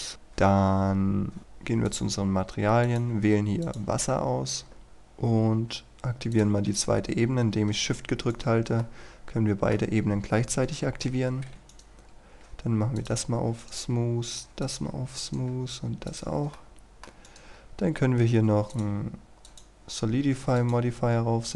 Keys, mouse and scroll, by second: 0.1-1.9 scroll up 1, 1.9 click, 2.4-2.9 scroll up 1, 2.9-4.8 drag, 4.9-5.6 scroll down 1, 6.4 shift+click, 8.4 right click, 8.9-10.4 middle drag, 11.7 right click, 12.0 scroll down 1, 12.3-13.0 scroll up 1, 13.0 click, 13.7 right click, 14.7 click, 15.3 right click, 16.1 click, 16.6 middle click, 17.3 right click, 17.5-18.0 scroll up 1, 18.7 click.